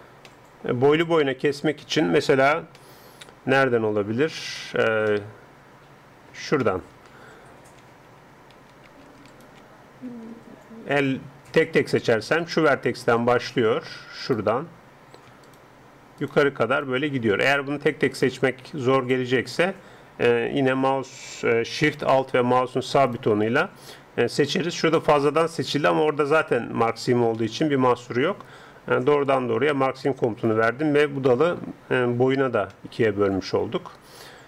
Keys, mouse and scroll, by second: 5.1-8.2 middle drag, 7.8 a, 8.2 a, 8.6 a, 9.3-11.2 right drag, 12.4-27.4 right drag, 20.6 a, 27.4-29.0 middle drag, 29.2-32.7 drag, 32.7-34.4 middle drag.